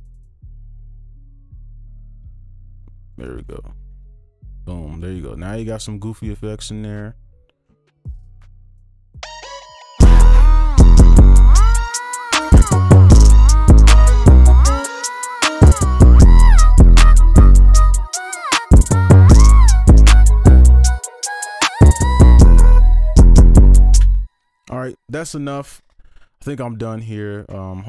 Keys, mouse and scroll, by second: 0.9 alt+click, 3.3 ctrl+alt+click, 3.6-5.6 ctrl+shift+scroll up 5, 5.6 right click, 6.3-6.8 scroll down 1, 6.8-7.6 scroll up 1, 7.6-8.8 scroll down 1, 8.8 space, 9.3 right click, 13.8-17.1 scroll up 1, 19.5-20.7 scroll up 1, 20.7 right click, 24.0 space, 26.8 right click.